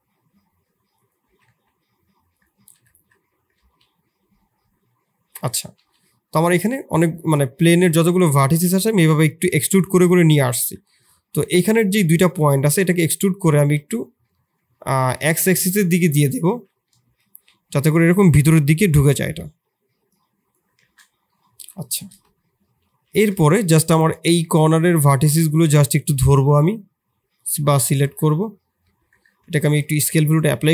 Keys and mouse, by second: 2.5 e, 5.7 shift+z, 7.0 click, 8.3 click, 11.3 middle click, 11.6 middle click, 12.4 e, 16.4 shift+z, 17.0 KP_7, 20.7 shift+z, 21.3 middle click, 22.2 KP_3, 22.8 shift+z, 24.7 shift+click, 25.0 shift+middle click, 25.9 shift+click, 26.2 shift+middle click, 27.9 shift+click, 28.8 Tab, 29.2 ctrl+a, 29.9 Tab.